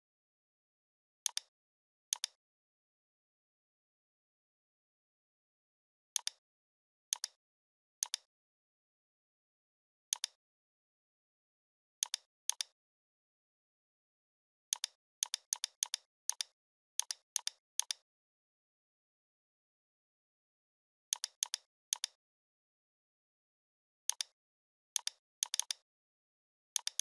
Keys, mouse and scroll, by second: 3.8-5.2 typing, 6.2 click, 7.1-7.8 shift+drag, 9.2 ctrl+t, 10.1 click, 10.4-11.4 typing, 12.0 click, 14.7-16.2 drag, 17.4-20.3 click, 18.2 space, 21.1 click, 22.9 right click, 24.1 click, 25.4-26.6 shift+drag.